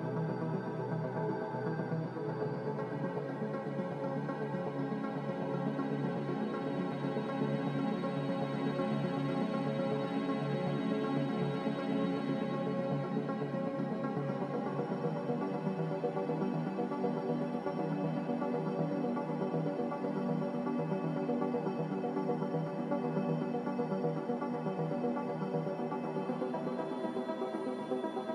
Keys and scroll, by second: 1.6 g, 4.0 Escape, 4.2 Escape, 4.8 z, 11.2 Return, 11.2 x, 11.2 3, 22.2 g, 25.5 x, 27.1 3.